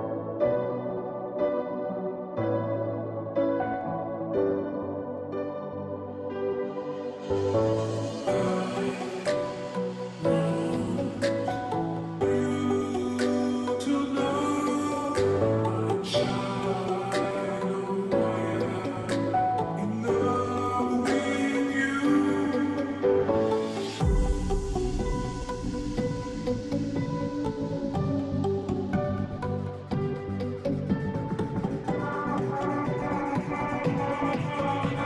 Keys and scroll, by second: 1.3 ], 1.7 ], 16.1 ctrl+t, 33.1 ctrl+t.